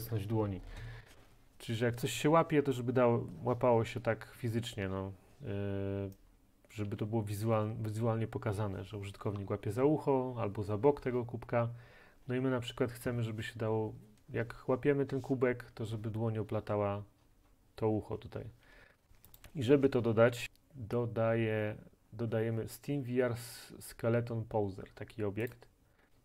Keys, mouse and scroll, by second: 6.9 s, 7.4-12.6 right drag, 19.4-20.5 drag, 25.6 click, 26.0-26.2 scroll down 2.